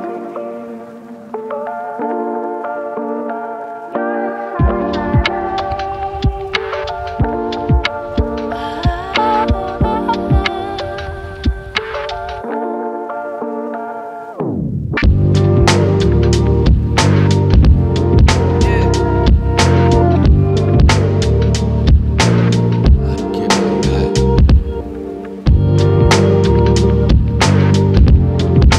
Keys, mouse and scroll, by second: 0.8 click, 1.0 g, 2.4 click, 2.6 g, 3.6 g, 4.7 click, 4.9 g, 6.2 click, 6.4 g, 7.3 click, 7.5 g, 9.2-10.5 shift+middle drag, 10.5 click, 11.0 g, 14.1 click, 14.3 g, 15.3 click, 15.5 g, 16.6 click, 17.1 g, 18.6 click, 18.9 g, 20.1 shift+middle click, 20.9 click, 21.5 g, 24.8 click, 25.2 g, 27.7 click, 27.9 g.